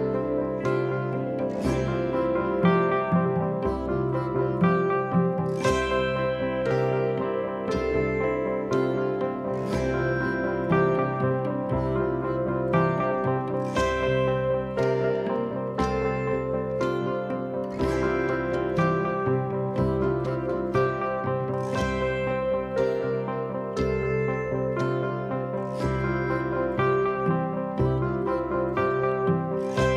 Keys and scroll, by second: 1.4 p, 2.6 p, 4.1 p, 6.1 p, 7.6 p, 8.6 p, 9.6 4, 11.1 ctrl+z, 13.9 p, 16.1 ctrl+z, 17.9 3, 19.9 p, 21.0 p, 22.2 p, 23.6 p, 24.7 p, 25.7 p, 27.7 p, 28.7 p, 29.6 p.